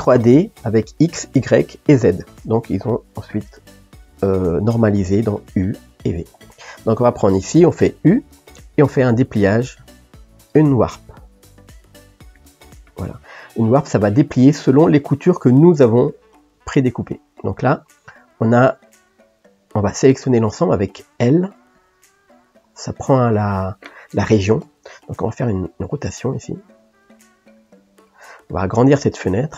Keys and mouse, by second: 14.4-18.9 middle drag, 18.9 click, 21.9 l, 26.1 r.